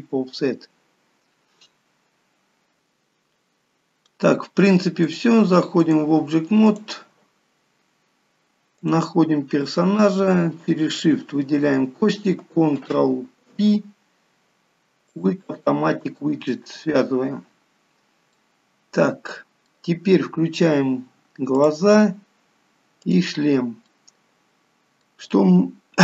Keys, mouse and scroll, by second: 2.8 middle click, 5.2 click, 6.8 click, 11.2 click, 11.3 shift+click, 13.7 ctrl+p, 18.6 middle click, 21.7 click, 23.2 click, 24.0 middle click, 25.5 middle click.